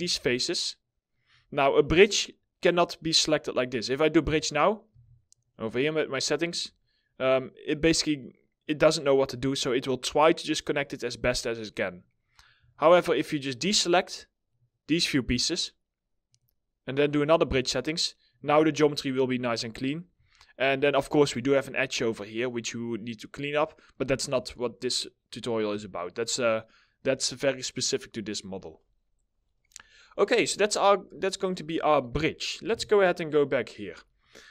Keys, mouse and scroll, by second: 4.4 w, 5.2 double click, 6.7 alt+scroll up 1, 12.4 alt+middle click, 13.1 alt+click, 18.3 alt+middle click, 19.9 alt+middle click, 24.0-24.5 scroll down 1, 24.5 middle click, 25.4 alt+middle click, 26.6 middle click, 29.7 middle click, 32.2 4, 33.0 middle click, 33.4-34.5 scroll up 1.